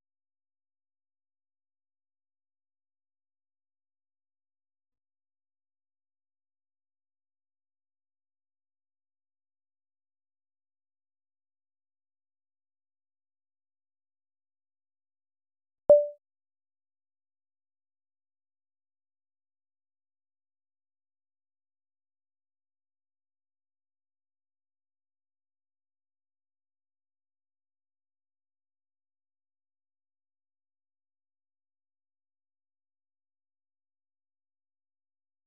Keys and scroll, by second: 11.6 ctrl+f, 13.2-16.3 typing, 17.0 Return, 17.4-21.4 typing, 22.8-25.6 typing, 25.9 Return.